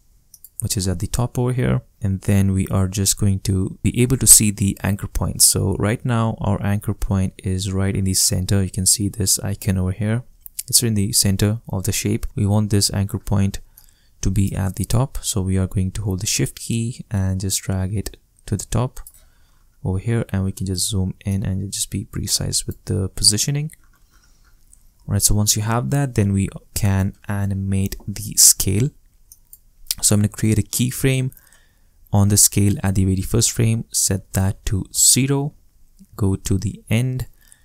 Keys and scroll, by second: 34.6 0, 34.9 Return.